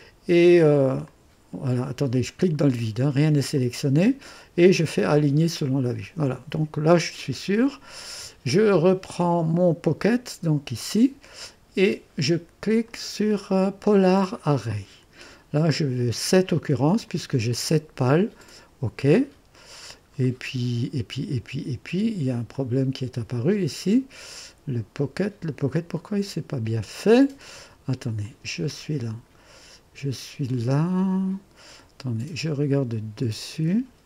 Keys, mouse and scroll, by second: 1.1 click, 2.1 click, 3.5 click, 4.9 click, 6.6-7.4 scroll up 3, 9.5 click, 12.8 click, 14.3 click, 16.6 click, 17.1 click, 18.4 click, 20.1-20.5 scroll down 1, 22.5 click, 24.3 click, 25.3 scroll down 1, 25.8 scroll up 1, 28.2 click, 33.2 click.